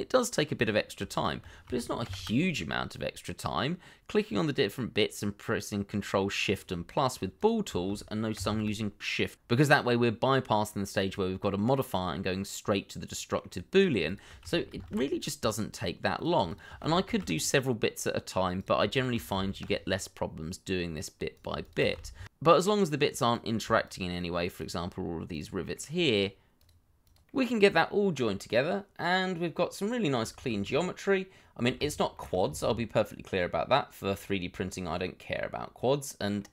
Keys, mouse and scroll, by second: 1.1 shift+click, 2.0 ctrl+shift++, 6.0 middle click, 7.1 shift+click, 8.3 ctrl+shift+KP_Add, 12.3 middle click, 14.0 shift+click, 14.7 ctrl+shift+KP_Add, 16.4 shift+click, 17.0 ctrl+shift+KP_Add, 18.9 shift+click, 19.5 ctrl+shift+KP_Add, 20.9 middle click, 21.6 shift+click, 22.1 ctrl+shift+KP_Add, 22.6 middle click, 23.8 shift+click, 25.3 shift+click, 25.6 shift+middle click, 26.1 shift+click, 27.2 ctrl+shift+KP_Add, 28.3 middle click, 31.4 shift+z, 31.8-32.2 scroll up 1, 32.2 middle click, 32.8 shift+z, 33.1 shift+middle click, 33.4 Tab, 35.3 scroll up 1, 35.6 middle click.